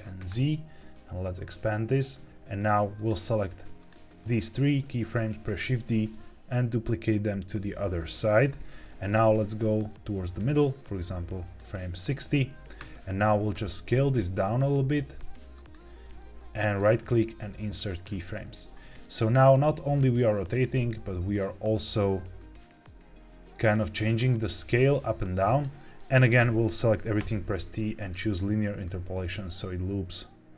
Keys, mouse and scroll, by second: 1.3 click, 2.9 click, 3.7 shift+click, 4.1 shift+click, 5.6 shift+d, 8.3 click, 9.0-11.5 drag, 13.4 s, 15.5 click, 16.6-17.9 right drag, 18.6-25.5 drag, 26.3 a, 27.1 t, 28.8-30.5 drag.